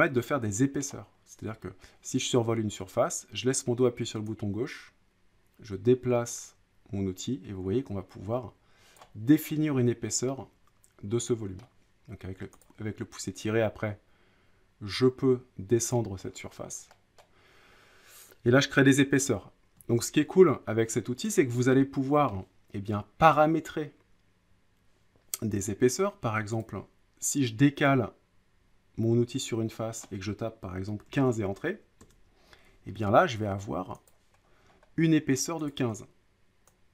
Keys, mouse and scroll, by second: 0.8-1.9 middle drag, 8.9 click, 9.4 middle click, 11.6 middle click, 12.6 click, 16.2-16.9 scroll down 6, 17.2 middle click, 18.9 middle click, 19.3 ctrl+z, 19.8 ctrl+z, 21.3 click, 22.3 middle click, 23.3 click, 26.6 click, 30.0 click, 30.9-31.8 typing, 33.1 typing, 34.1 click, 34.4-35.1 scroll, 35.7 click.